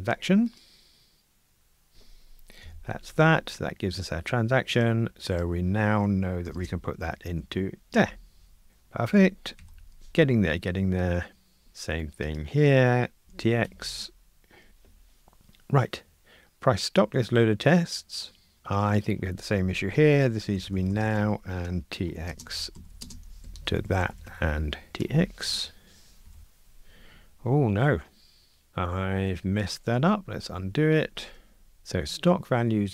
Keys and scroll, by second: 0.6 super+b, 7.9 Escape, 9.6 super+F9, 13.7 Escape, 14.7 super+F9, 25.0 Escape, 30.3 super+z, 31.8 super+z.